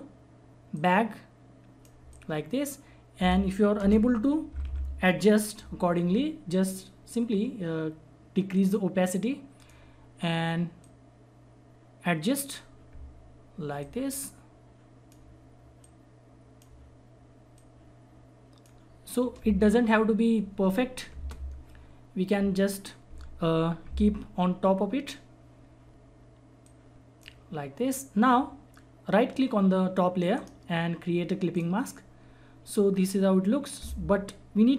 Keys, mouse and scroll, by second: 3.8 Return, 4.5 Down, 8.5-15.8 drag, 15.8-21.1 shift+drag, 21.1 Return, 26.6-29.7 drag, 30.3 right click, 31.5 click.